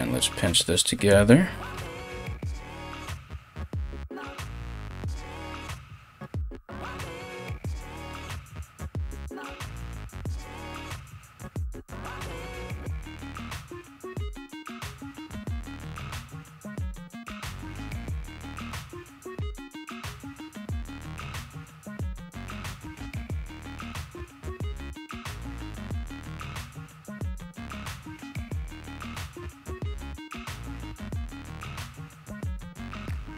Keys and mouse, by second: 2.7 ctrl+-, 16.8 [, 24.5 [.